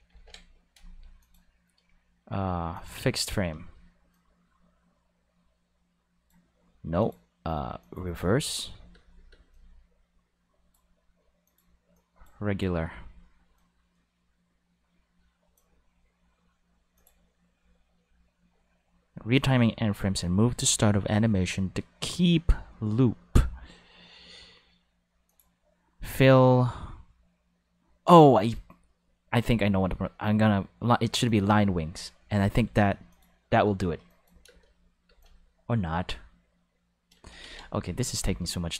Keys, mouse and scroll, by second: 0.1 ctrl+s, 1.2 click, 2.8 click, 4.1-6.3 drag, 7.0 click, 7.8 click, 8.9 space, 9.3 space, 9.5 click, 11.0 click, 11.5 click, 11.9 click, 13.6-15.6 drag, 17.0 click, 25.3 click, 31.3 click, 33.1 click, 34.1 click, 34.5 space, 35.1 space, 35.2-37.1 drag, 37.4 ctrl+s.